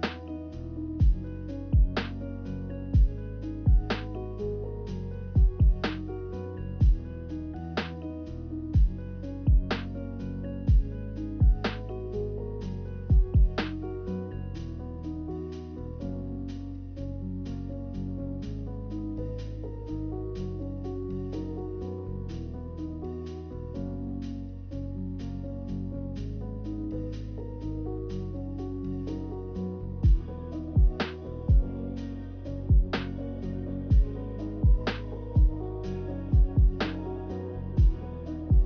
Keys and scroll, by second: 22.1 Delete, 24.9 a, 25.9 Delete, 30.0-31.5 typing, 34.8 0.